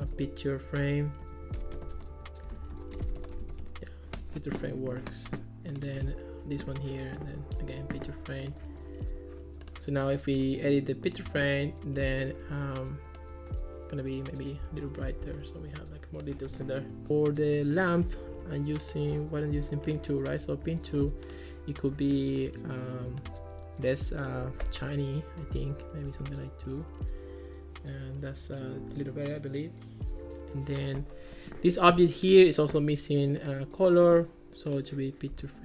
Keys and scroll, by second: 0.0-4.0 typing, 26.1 2, 26.3 Return.